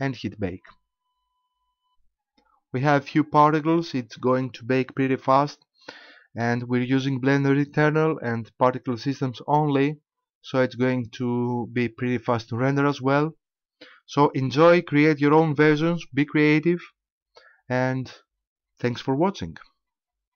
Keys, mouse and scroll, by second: 6.4 Escape, 8.7 click, 14.6 click.